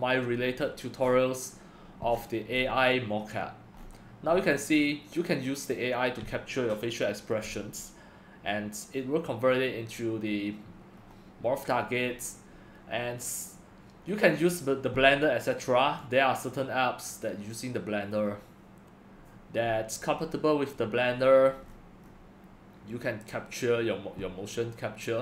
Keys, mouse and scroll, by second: 0.0-1.0 drag, 1.0-1.7 scroll, 1.7-9.8 middle drag, 2.1-3.8 scroll, 3.8-4.3 scroll, 4.4-4.9 scroll, 11.0-16.2 middle drag, 11.0-11.9 scroll, 12.0-14.2 scroll down 1, 16.2-18.3 drag, 18.3-25.2 middle drag, 18.3-18.8 scroll, 20.1-21.2 scroll down 1, 21.2 scroll down 1, 21.7-22.5 scroll.